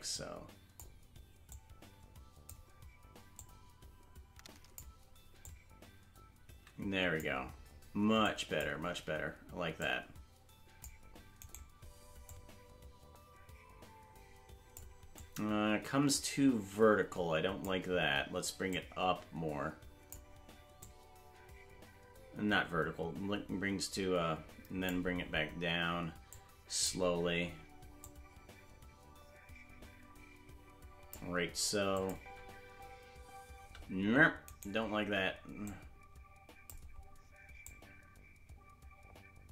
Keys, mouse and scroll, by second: 1.5 click, 3.3 click, 5.4 click, 8.2 click, 9.7 click, 11.6 right click, 12.2 click, 15.1 click, 18.6 click, 20.8 click, 26.3 click, 28.0 click, 31.9 click, 32.1 space, 34.6 right click, 34.6 space, 35.6 click, 37.6 click.